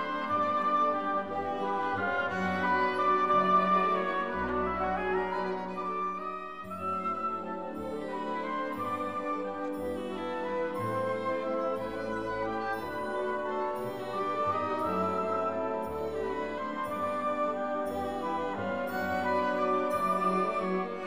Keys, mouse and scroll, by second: 0.0 click, 0.3 click, 16.0-21.0 shift+middle drag, 16.0 click.